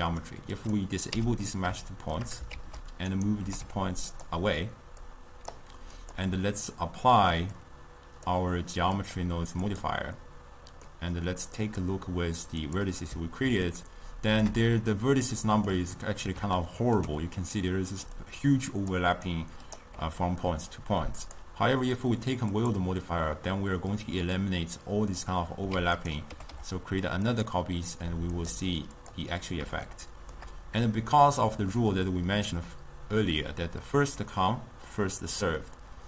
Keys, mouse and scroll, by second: 0.7 click, 1.2 m, 1.9 shift+middle click, 2.6 shift+d, 3.6 g, 5.1-6.2 drag, 7.6-10.9 drag, 10.9-11.7 middle drag, 11.7-13.8 drag, 13.8-18.1 ctrl+middle drag, 18.1 d, 18.3 click, 19.0-19.3 d, 19.9 d, 21.3-25.8 drag, 25.8 shift+d, 26.4 g, 28.4-30.0 drag, 30.0-33.6 shift+middle drag.